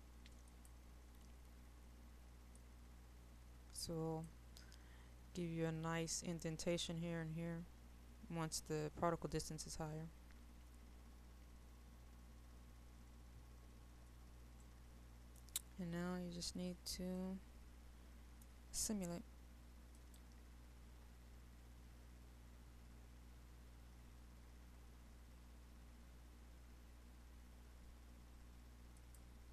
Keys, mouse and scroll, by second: 0.9-5.2 drag, 14.6 middle click, 16.2-17.2 scroll down 1, 17.2-19.2 middle drag, 20.0 click.